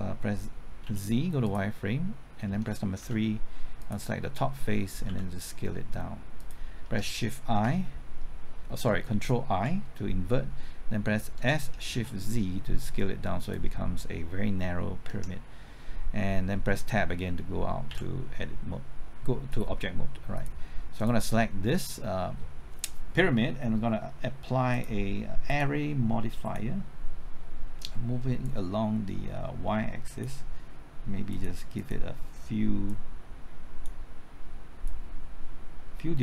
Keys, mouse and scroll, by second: 0.8 z, 3.0 3, 5.1 s, 7.7 shift+i, 9.5 ctrl+i, 11.4 s, 11.9 shift+z, 15.1 Tab, 17.9 z.